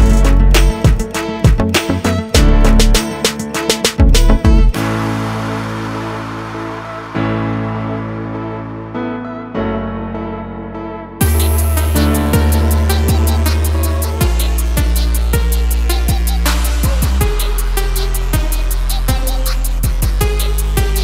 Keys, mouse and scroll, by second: 0.6 click, 1.5 click, 5.2 click, 6.3 click, 6.4 double click, 7.0 click, 7.1 double click, 7.8 click, 7.9 double click, 8.5 click, 8.6 double click, 10.1 click, 11.2 click, 12.4 click, 13.7 click, 15.1 click, 15.8 scroll down 1, 16.6 click, 18.2 click, 20.9 click.